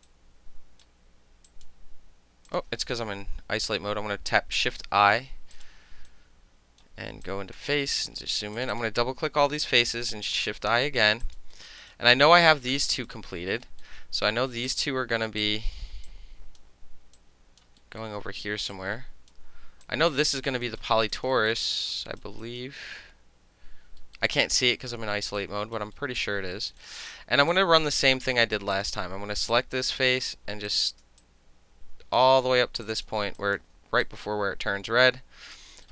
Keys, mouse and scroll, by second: 0.0-0.8 alt+right drag, 1.5 click, 2.5 click, 4.2-5.5 shift+middle drag, 4.8 shift+i, 5.5 click, 5.6 middle click, 6.1 right click, 7.2-7.5 drag, 8.1 f, 8.5 click, 8.7 click, 10.1 shift+i, 10.7 alt+middle click, 10.8 alt+right click, 11.0 alt+middle click, 11.2 alt+click, 11.3 alt+middle click, 11.7 alt+middle click, 11.8 alt+right click, 11.9-12.9 alt+middle drag, 12.9 alt+right click, 13.1-13.6 alt+middle drag, 13.8 alt+middle click, 14.6 click, 15.4 click, 16.1-16.6 drag, 17.1-17.6 drag, 17.8 alt+middle click, 18.0-18.7 alt+middle drag, 18.7-19.3 drag, 19.3-19.8 middle drag, 19.8-20.4 drag, 20.4 alt+middle click, 20.6 alt+right click, 20.8 alt+middle click, 21.0 alt+middle click, 21.1 alt+right click, 21.2 alt+middle click, 21.5 alt+middle click, 21.8 alt+middle click, 21.9 alt+right click, 22.2 alt+middle click, 22.4 alt+right click, 22.6-24.0 alt+middle drag, 24.1 alt+middle drag, 25.1 alt+middle click, 25.4 alt+click, 25.9 alt+middle click, 26.5 alt+middle click, 26.8 alt+right click, 27.5 alt+click, 28.7 click, 29.5 alt+click, 30.7 shift+click, 30.8 shift+click, 30.9 alt+shift+middle click, 31.2 alt+click, 32.1-33.4 alt+shift+middle drag, 32.8 shift+click, 33.0 shift+click, 33.4 alt+click, 33.5 alt+middle click, 34.0-35.5 alt+drag, 35.5 alt+middle click, 35.8-35.9 alt+middle drag.